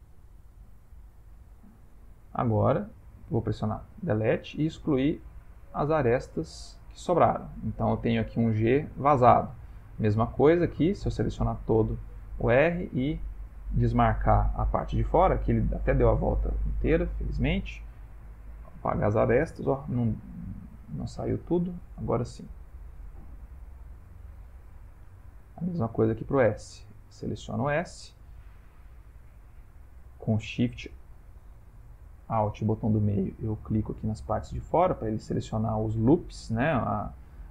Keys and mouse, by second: 1.4 ctrl+middle click, 1.8 ctrl+middle click, 2.2 shift+middle click, 2.5 shift+middle click, 4.0 x, 6.5 ctrl+middle click, 7.3 shift+middle click, 7.7 shift+middle click, 9.3 shift+middle click, 10.7 click, 11.9 ctrl+middle click, 13.1 alt+shift+click, 16.5 alt+shift+click, 17.7 x, 19.7 ctrl+z, 20.9 alt+shift+click, 23.0 x, 24.4 shift+middle click, 25.4 shift+middle click, 26.3 click, 29.2 alt+shift+click, 31.7 alt+shift+click, 35.4 alt+shift+click, 36.0 shift+middle click.